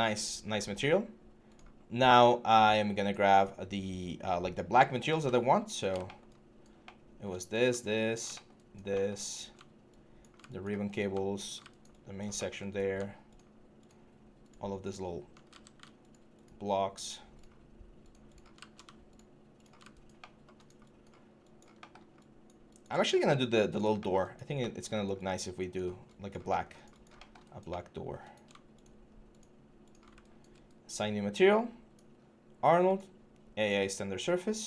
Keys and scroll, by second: 15.3 ctrl+z.